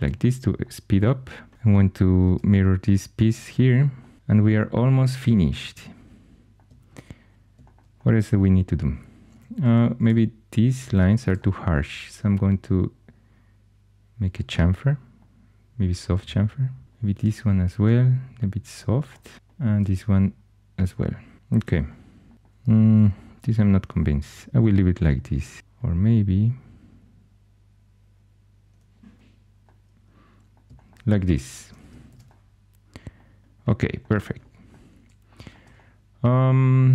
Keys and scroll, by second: 1.5 4, 2.2 alt+x, 9.3 2, 21.6 shift+super+e, 22.9 super+z, 32.0 shift+super+e.